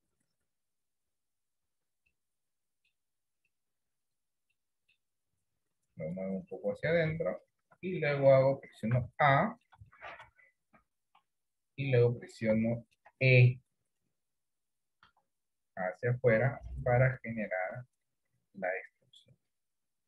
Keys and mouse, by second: 1.1 click, 1.7 Tab, 2.2 middle click, 4.7 middle click, 6.2-7.6 drag, 7.7 Tab, 8.1 middle click, 9.0 a, 9.4 middle click, 10.0 shift+middle click, 10.9 KP_1, 11.3 KP_3, 12.8 shift+middle click, 15.2 e, 19.8-20.0 middle drag.